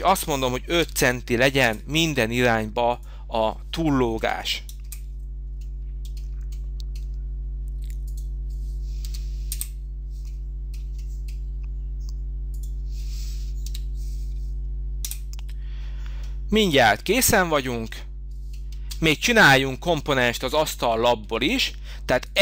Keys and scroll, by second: 0.8 5, 1.6 Return, 3.0 Return, 4.1 5, 4.8 Return, 6.5 Return, 9.0 5, 9.4 Return, 13.6 5, 15.0 Return, 18.7 space.